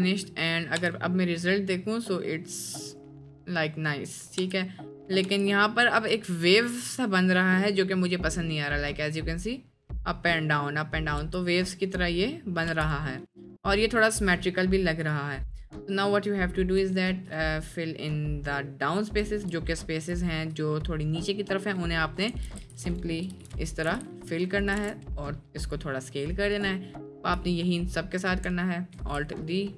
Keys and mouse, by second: 0.4 click, 0.8 space, 4.4 space, 5.2 space, 6.4 space, 6.7 click, 11.3 space, 13.2-13.7 middle drag, 13.2 space, 14.0-14.5 middle drag, 15.0-15.6 drag, 16.3 middle drag, 16.9 shift+middle drag, 17.5 middle click, 18.7 middle click, 19.3 shift+middle click, 19.7 middle click, 20.3 shift+click, 20.8 click, 21.5 click, 22.5 alt+f, 22.5 alt+d, 23.2 g, 23.9 g, 24.7 s, 26.6 click, 27.4-28.1 shift+drag, 28.9 alt+d.